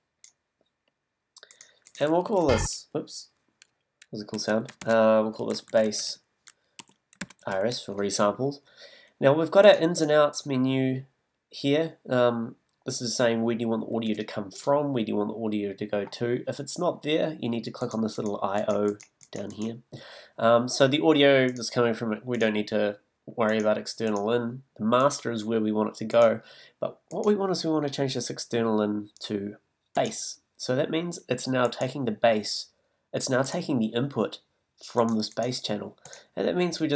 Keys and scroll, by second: 2.4 t, 4.8 super+r, 5.4 shift+super+r, 5.6 shift+a, 6.8 shift+r.